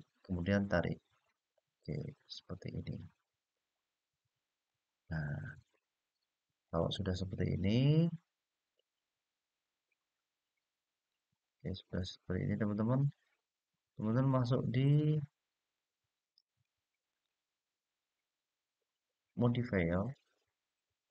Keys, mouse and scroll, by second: 4.2 click, 5.2 click, 6.6-14.6 middle drag, 16.8 click, 19.7-21.1 drag.